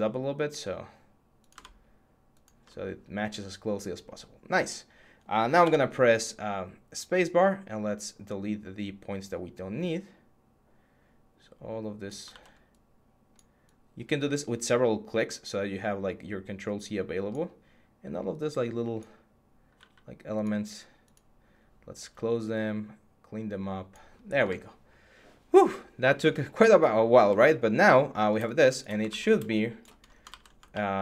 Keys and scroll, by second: 5.4 x, 12.1 ctrl+z, 19.5 x, 21.8 x, 28.9 ctrl+z, 30.1 ctrl+z.